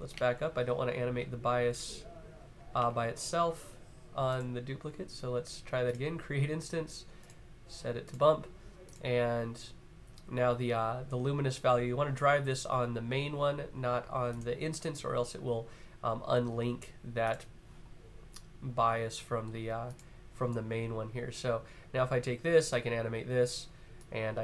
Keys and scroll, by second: 1.1 super+z, 1.5 super+z, 2.5 super+z, 2.6 super+z.